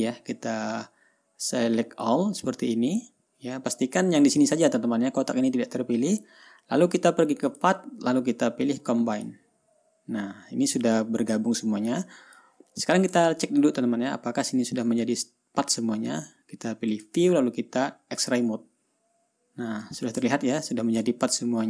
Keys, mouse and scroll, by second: 0.8-2.7 drag, 7.9 click, 9.6 click, 11.3-13.0 drag, 13.7-14.6 ctrl+scroll up 4, 14.9-15.3 ctrl+scroll down 2, 17.4 click, 18.7 click, 20.7-21.1 ctrl+scroll up 2.